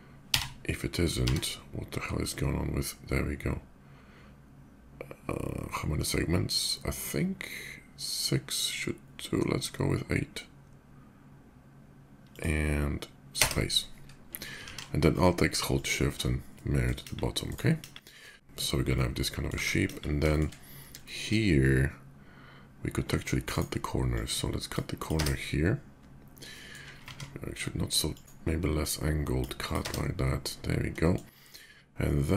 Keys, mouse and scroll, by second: 12.1 click, 13.2 space, 15.2 alt+shift+x, 15.5 click, 16.3 middle drag, 16.8 KP_5, 17.2 right click, 18.0 middle drag, 18.5-19.2 middle drag, 20.1 shift+middle click, 20.8 middle click, 22.7-23.2 shift+drag, 23.3 shift+right click, 23.9-24.5 drag, 24.8 click, 24.9 space, 25.7 middle click, 27.9 ctrl+z, 27.9 ctrl+click, 28.5-29.1 ctrl+drag, 29.4 ctrl+click, 29.5 space, 30.4 middle click.